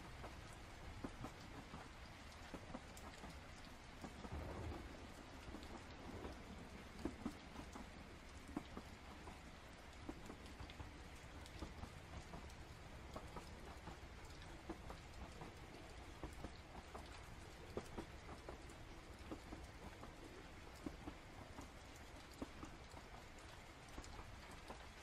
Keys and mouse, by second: 1.7-2.7 drag, 3.4 click, 4.2 click, 5.5 ctrl+z, 6.1 click, 6.3 click, 7.2 ctrl+z, 7.5 click, 9.7 click, 10.7 ctrl+z, 11.1 click, 12.6 ctrl+z, 13.0 click, 14.5-16.8 drag, 22.8-24.2 drag.